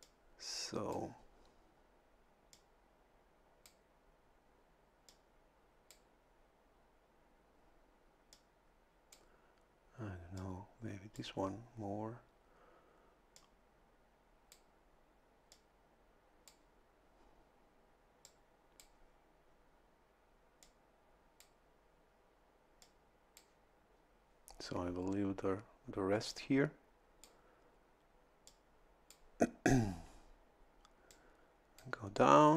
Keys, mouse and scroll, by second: 0.0-1.1 drag, 2.5-3.8 drag, 5.1-6.1 drag, 8.3-9.3 drag, 10.4 click, 13.3-14.7 drag, 15.5-16.7 drag, 18.2 click, 20.6 click, 22.8 click, 26.3-27.4 drag, 28.5-29.5 drag, 31.1 click.